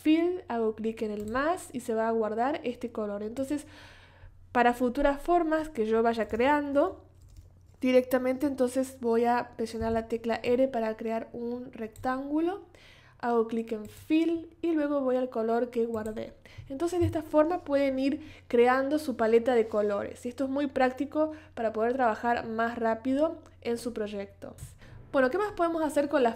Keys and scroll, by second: 9.8 r, 24.5 Home.